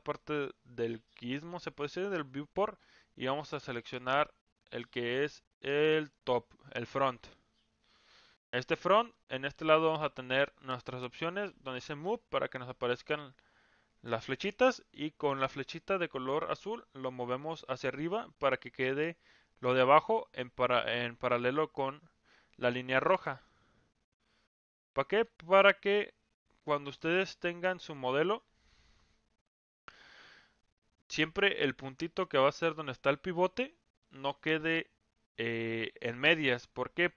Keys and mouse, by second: 11.7 click, 17.0-20.1 drag, 23.5-27.0 drag.